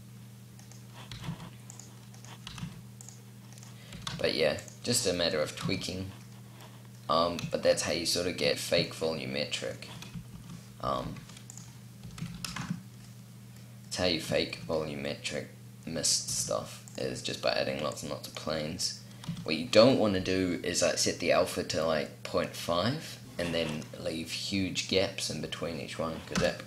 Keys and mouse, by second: 0.7 r, 2.1 r, 4.7 r, 4.8 middle click, 5.2 a, 9.9 shift+d, 11.6 r, 13.5 click, 15.8 r, 17.5 click, 18.8 a, 19.1 click, 23.0-25.0 middle drag, 25.3 middle click, 26.0 KP_0.